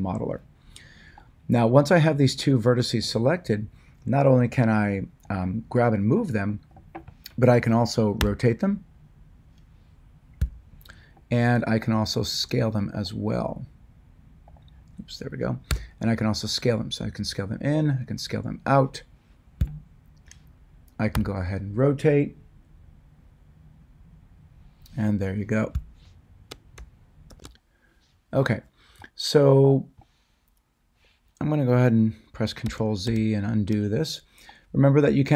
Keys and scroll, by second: 8.1 r, 10.4 ctrl+z, 15.7 s, 19.5 ctrl+z, 21.1 r, 25.7 Escape, 32.6 ctrl+z.